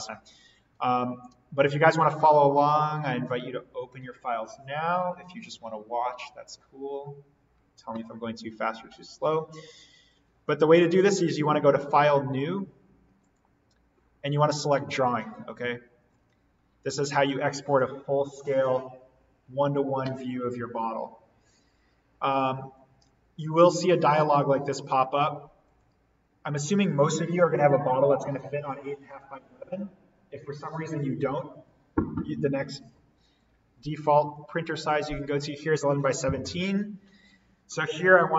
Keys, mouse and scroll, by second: 13.1 click, 23.4-25.7 drag, 34.3-37.5 drag.